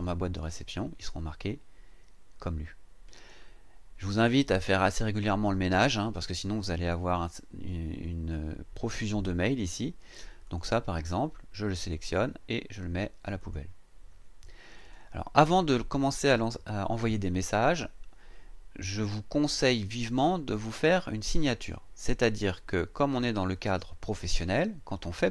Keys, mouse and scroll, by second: 10.5 click, 13.4 click, 14.8 click, 23.5 click.